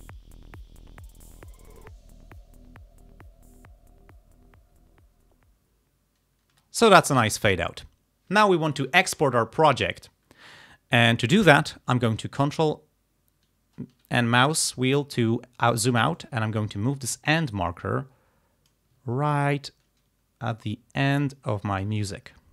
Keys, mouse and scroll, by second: 6.5 space, 12.5-13.0 ctrl+scroll down 2, 16.2-18.9 drag, 19.2-19.7 ctrl+scroll up 2, 20.6-22.1 drag, 22.4-22.5 ctrl+scroll down 2.